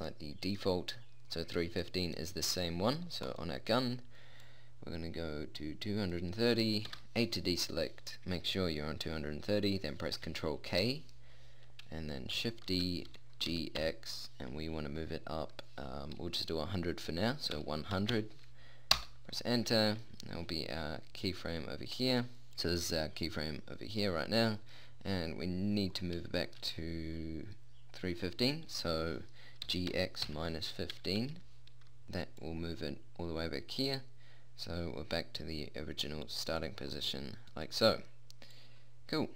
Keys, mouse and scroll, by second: 3.6-4.8 right drag, 4.8 middle click, 5.6-6.7 drag, 7.3 a, 11.0 ctrl+k, 13.1 shift+d, 23.0-24.8 drag, 27.2-30.0 middle drag, 30.0 g, 32.8-34.8 drag.